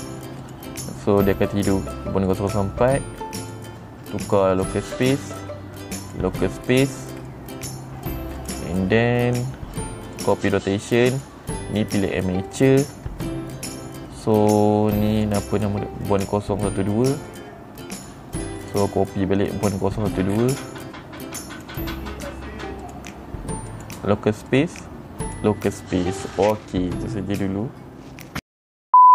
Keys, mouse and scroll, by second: 0.9 click, 2.8 click, 4.0 click, 5.1 click, 5.6 click, 6.6 click, 7.2 click, 7.8 middle click, 8.9 click, 10.7 click, 11.6 click, 13.0 click, 15.7 click, 17.8 click, 19.1 click, 20.8 middle click, 22.1 click, 23.4 click, 24.2 click, 25.0 click, 25.8 click.